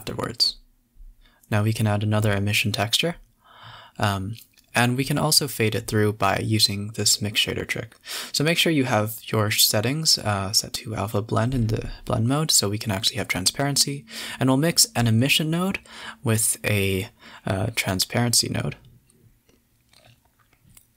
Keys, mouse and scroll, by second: 0.9 ctrl+alt+KP_0, 2.3 click, 2.9 click, 3.1 click, 3.3 x, 3.6 shift+a, 4.7 BackSpace, 6.1-7.9 drag, 8.4-9.5 drag, 9.5 shift+a, 11.8-12.1 scroll up 4, 12.1 middle click, 12.5-13.5 drag, 13.5 a, 13.6 a, 15.4-16.9 drag, 17.3 click, 17.4 g, 18.0 middle click, 18.3 shift+a.